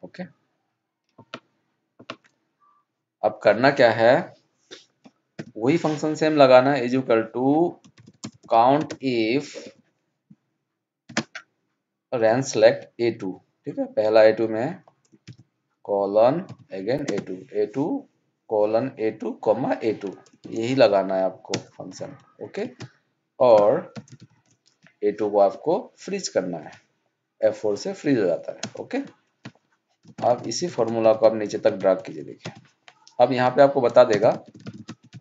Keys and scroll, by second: 30.2 ctrl+Down, 30.7 ctrl+shift+Up, 31.1 ctrl+d, 31.7 ctrl+Up, 34.4 alt+d.